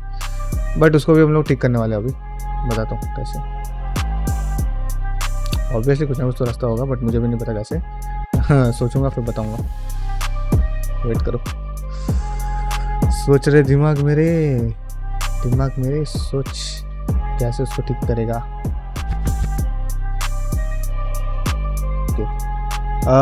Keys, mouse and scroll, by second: 3.2 middle click, 3.4 f, 3.7-5.2 shift+drag, 5.4 middle click, 5.7 shift+click, 6.2 middle click, 6.8 shift+click, 7.4 middle click, 7.9-9.9 shift+drag, 10.1 middle click, 10.5 shift+click, 11.4 middle click, 11.7-13.5 shift+drag, 13.7 middle click, 14.3 ctrl+z, 15.0 middle click, 15.6 Tab, 16.1 middle click, 16.3 1, 16.6 click, 16.7 g, 17.4 click, 17.5 g, 17.9 click, 18.5 shift+click, 18.7 g, 19.6 middle click, 20.8 ctrl+middle click, 21.3 middle click, 21.6 ctrl+middle click, 21.9 shift+middle click, 22.4 ctrl+middle click, 22.8 middle click.